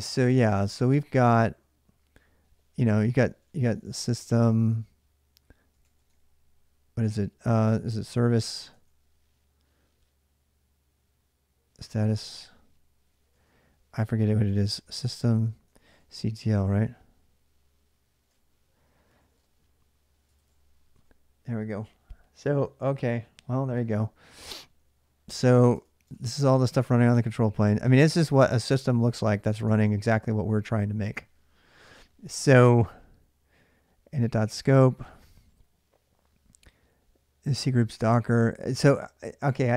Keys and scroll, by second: 0.0-1.0 typing, 2.2-8.0 typing, 8.1 Tab, 8.5 Tab, 11.4-16.6 typing, 17.6-20.8 typing, 25.5 ctrl+[, 25.6-26.6 typing, 27.1 Up, 28.0-29.4 typing, 29.4 Return.